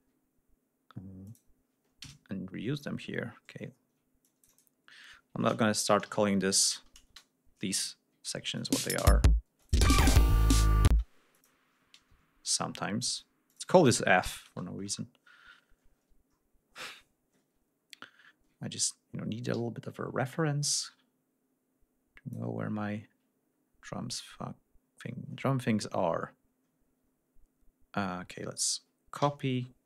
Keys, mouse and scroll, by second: 1.2 click, 1.9 KP_Enter, 3.7 ctrl+scroll down 2, 4.1 ctrl+click, 5.5-7.1 typing, 7.8 ctrl+scroll down 2, 8.5 click, 8.7 space, 9.4 space, 9.5 click, 9.9 ctrl+scroll up 2, 10.8 space, 11.2 click, 12.0 KP_Enter, 13.0 click, 13.4 click, 14.1 shift+f, 14.4 shift+Return, 17.7-18.4 ctrl+scroll up 4, 19.4 r, 20.5-22.4 drag, 23.1-23.7 scroll down 2, 23.7-24.0 scroll up 2, 25.4 ctrl+scroll down 2, 27.0 ctrl+scroll up 3, 29.1 ctrl+c.